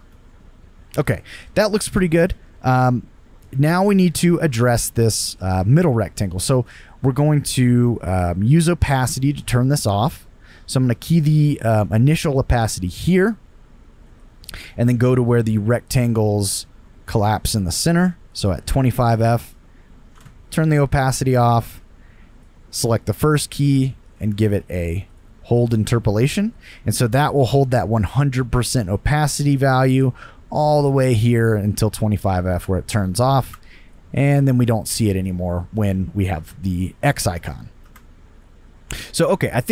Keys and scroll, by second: 0.0 space, 5.3 space, 20.1 0, 20.1 Return, 20.2 Return, 33.4 space, 37.8 space.